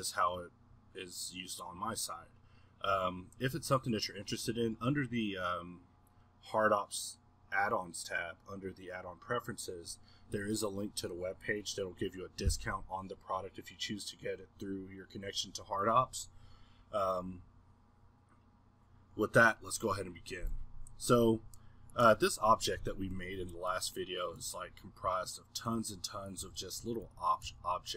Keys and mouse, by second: 21.9 click, 23.1-23.7 middle drag, 26.4 middle click, 26.4 g, 27.4 g.